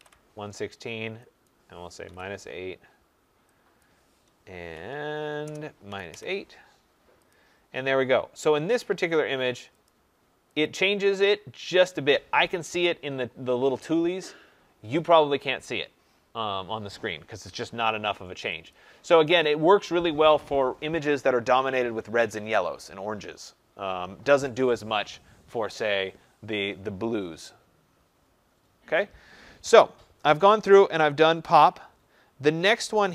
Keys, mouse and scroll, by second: 0.0-2.5 typing, 1.4 click, 3.8 click, 5.3-6.3 typing, 7.2 click, 8.5-9.2 typing, 9.1 click, 9.8 click, 10.6 click, 12.3 click, 18.7 click, 19.4 click.